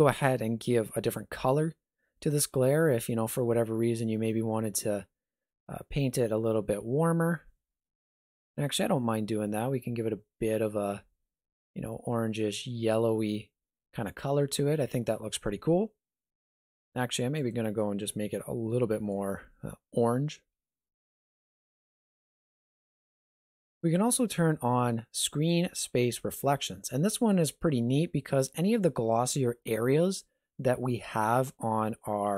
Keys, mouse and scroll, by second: 0.1 click, 17.4 click, 22.9 click, 25.3 click.